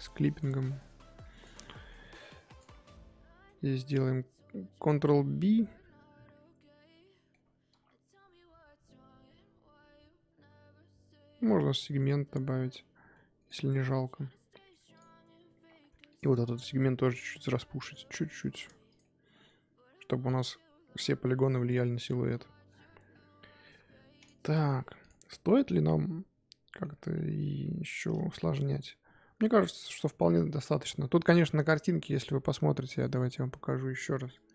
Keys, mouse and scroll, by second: 0.3 click, 1.3 click, 1.6-2.0 middle drag, 2.0 Tab, 2.3 3, 2.5 click, 2.7-7.7 middle drag, 7.7 ctrl+b, 13.8-14.9 middle drag, 14.9 click, 16.1 alt+click, 16.5 middle click, 17.0 scroll up 2, 17.3 alt+s, 18.6 Tab, 18.9 click, 19.0-22.9 middle drag, 22.9 scroll down 1, 23.1-24.2 middle drag, 24.2 click, 24.4-24.8 middle drag, 24.8 scroll down 1, 25.0 click, 25.4-26.9 middle drag, 26.9-28.3 scroll up 5, 27.1 KP_3, 28.3-34.5 middle drag.